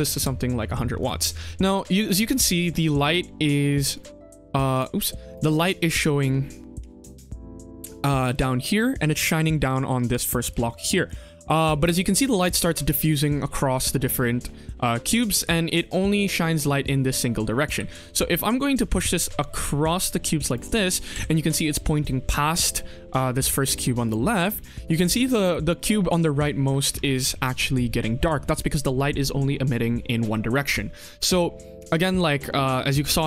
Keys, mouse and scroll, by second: 5.2 click, 10.0 click, 10.4 click, 15.3 click, 17.6 g, 20.7 s, 24.0 click, 24.7 click.